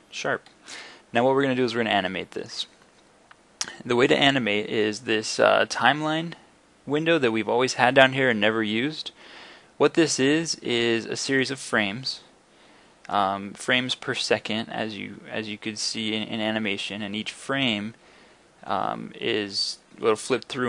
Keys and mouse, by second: 0.0 Escape.